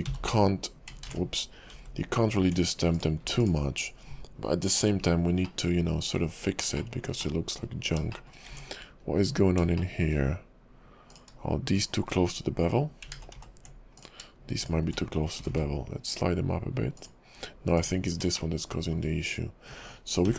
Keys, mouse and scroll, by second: 0.2 h, 1.2 ctrl+z, 1.9 j, 2.4 Tab, 2.9 click, 3.2 x, 5.0 scroll down 4, 5.4 middle click, 6.8 shift+middle click, 7.2 middle click, 7.8 scroll up 2, 8.1 shift+middle click, 8.5 Tab, 8.9 scroll up 1, 9.8 shift+middle click, 11.1 click, 11.7 shift+click, 13.3 ctrl+z, 13.5 ctrl+z, 14.0 click, 14.6 click, 15.4 g, 17.8 click, 18.4 shift+middle click, 20.2 g.